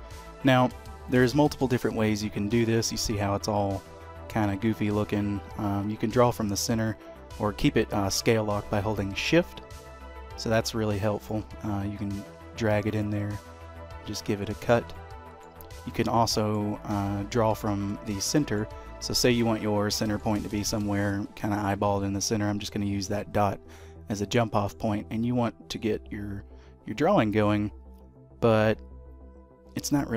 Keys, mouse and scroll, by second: 1.7 click, 13.3 middle click, 14.9 shift+middle click, 15.9 middle click, 18.1 shift+middle click, 19.0 middle click, 20.5 shift+middle click, 24.6 click.